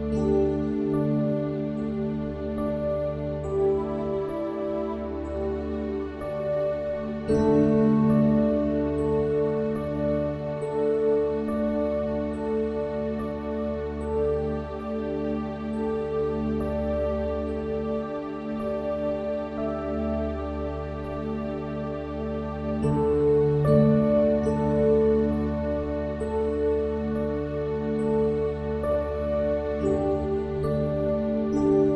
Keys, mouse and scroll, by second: 0.4-2.6 drag, 8.5 s, 11.1 KP_1, 12.6 middle click, 18.4 s, 21.9 Tab, 25.2-27.0 drag, 28.0 ctrl+KP_Add, 30.2-31.9 middle drag.